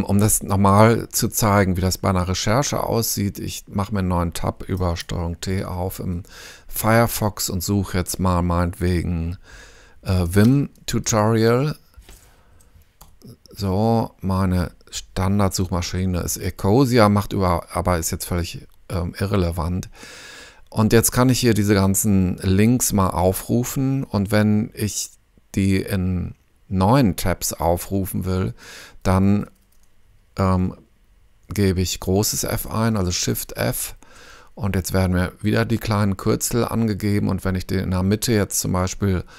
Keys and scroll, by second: 5.5 super+t, 10.0-11.7 typing, 12.5 Down, 13.0 Return, 33.6 shift+f.